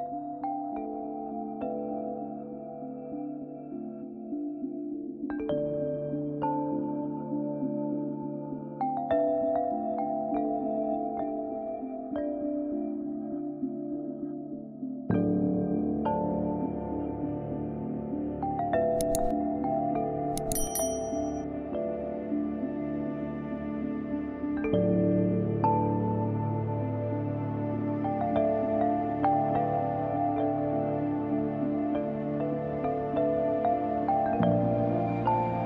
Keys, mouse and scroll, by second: 1.2 typing, 1.4 click, 2.6-4.2 typing, 2.9 click, 3.9 click, 4.3-6.2 drag, 7.2-8.2 typing, 7.5 click, 8.3 click, 8.8 scroll down 1, 11.1-12.4 scroll up 1, 13.9-15.3 scroll down 1, 15.3-16.7 scroll up 1, 16.7-17.2 scroll down 1, 17.2-19.1 scroll up 1, 19.6 ctrl+alt+e, 20.6 ctrl+a, 24.8-26.8 ctrl+drag, 27.6 ctrl+j, 28.8-35.5 ctrl+drag.